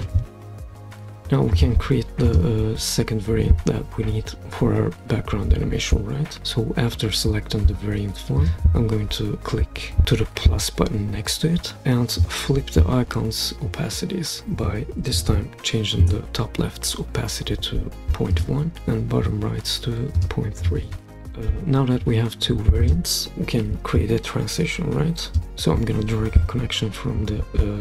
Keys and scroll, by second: 0.4 typing, 0.4 Return, 15.2 typing, 16.0 Return, 21.0-21.3 typing.